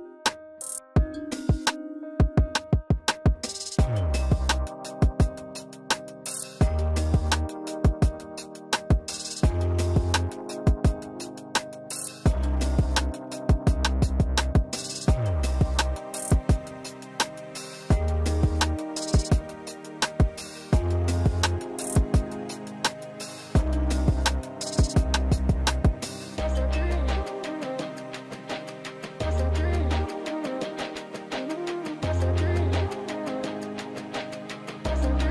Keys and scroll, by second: 27.4 ctrl+r.